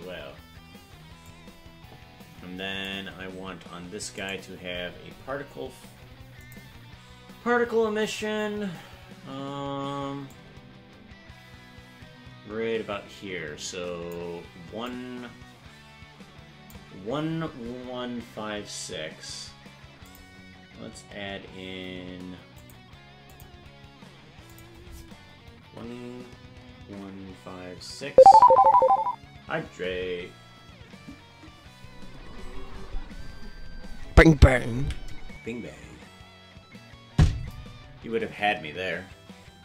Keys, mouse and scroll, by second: 1.3-2.9 drag, 4.2 right click, 6.4 click, 10.3-14.2 drag, 14.9-16.7 drag, 20.0 click, 22.5 click, 24.4-39.6 drag.